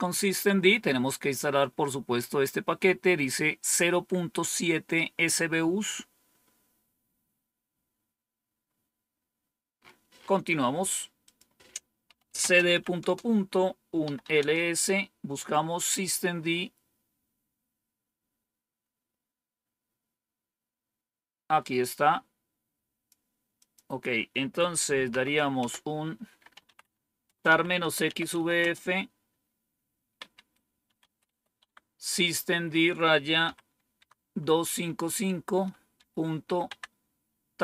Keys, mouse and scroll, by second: 2.1-6.2 scroll up 2, 6.2-6.9 scroll down 2, 8.4-9.2 scroll down 3, 9.7 scroll up 2, 11.1 click, 11.7-14.6 typing, 21.7-23.0 drag, 23.5 click, 25.0 typing, 26.1-28.7 typing, 30.1-31.7 typing, 33.3 typing, 35.9-36.9 typing.